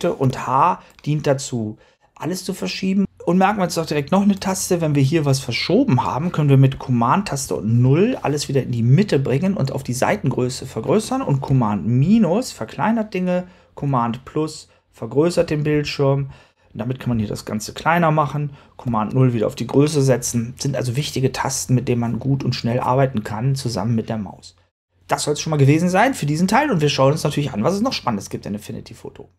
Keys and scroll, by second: 0.1 h, 7.3 super+0, 11.9 super+-, 15.2 super+-, 17.0 super+-, 18.7 super+0.